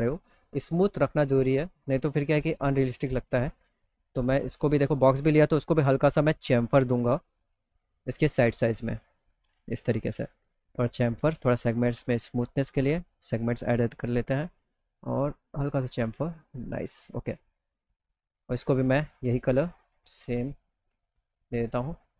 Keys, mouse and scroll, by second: 0.4 click, 2.8 click, 4.0 ctrl+a, 5.0 click, 6.3 click, 8.0 middle click, 8.7 middle click, 10.6 click, 10.9 click, 11.1 click, 11.3 click, 12.0 click, 12.3 click, 14.3-15.4 drag, 15.9 click, 16.3 click, 16.9 middle click, 17.7 middle click, 18.8 click, 19.1 click, 20.5 click.